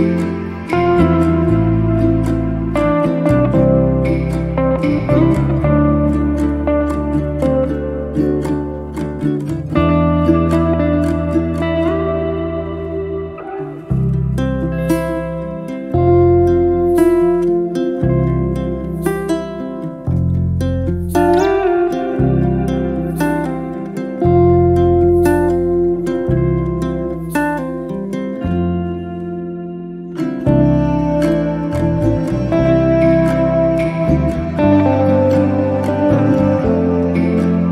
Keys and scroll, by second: 6.5 l, 9.5 space, 26.9 space, 29.5 m, 33.7 KP_Multiply, 34.8 1, 35.1 4, 35.5 Return, 36.6 space.